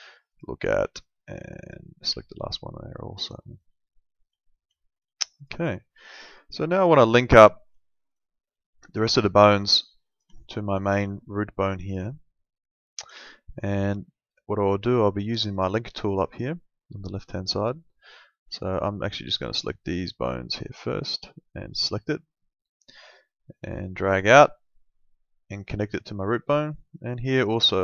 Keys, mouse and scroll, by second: 0.3 click, 3.4 middle click, 3.8 alt+middle click, 4.7 alt+middle click, 5.4 click, 5.7 alt+middle click, 6.9 click, 7.2 alt+middle click, 8.8 click, 10.4 alt+middle click, 13.1 middle click, 19.5 click, 26.7 click.